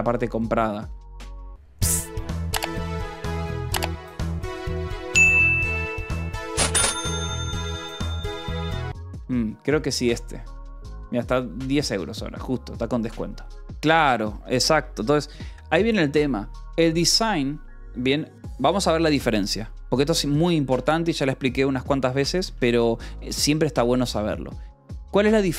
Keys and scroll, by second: 23.0 j, 23.6 o, 23.9 Return.